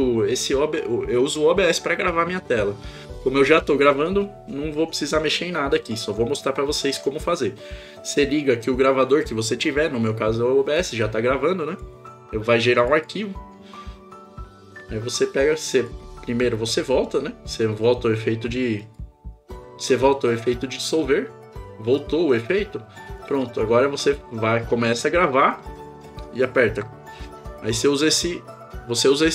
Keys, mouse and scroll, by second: 10.8-11.8 drag, 18.8 click, 23.1 click.